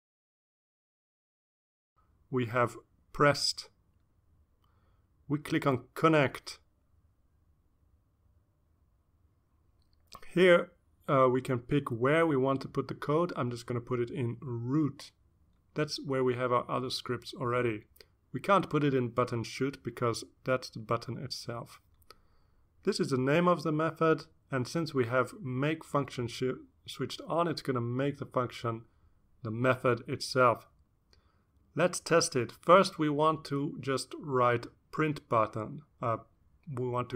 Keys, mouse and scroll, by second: 3.5 click, 8.1 click, 13.6-14.1 scroll up 1, 14.6 click, 15.7-16.1 drag, 16.5 click, 19.3 click, 20.0 click, 22.5 click, 23.6 click, 27.9 click, 30.0-31.4 drag, 32.0-33.7 typing, 35.2-37.1 typing.